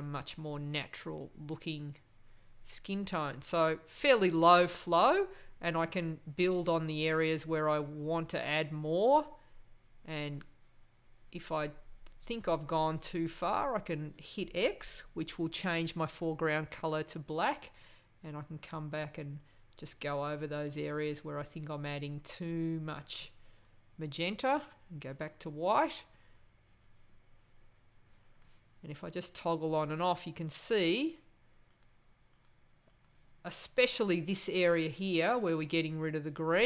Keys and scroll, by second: 15.4 x, 24.4 x.